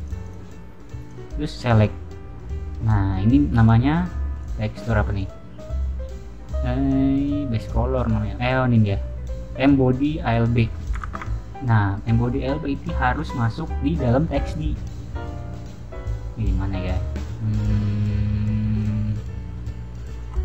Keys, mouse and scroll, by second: 0.0 click, 0.1 click, 1.0 click, 1.7 click, 2.3 middle click, 4.3 click, 5.1 click, 5.7 middle click, 7.5 click, 13.1 click.